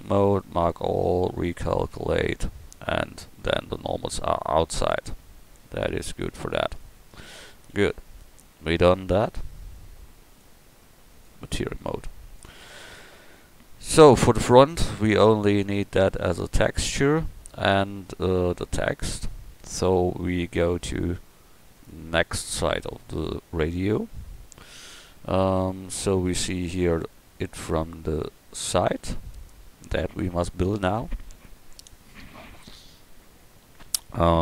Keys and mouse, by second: 1.9 Tab, 7.7 KP_1, 26.0 middle drag, 27.4 middle click, 27.8-33.9 middle drag.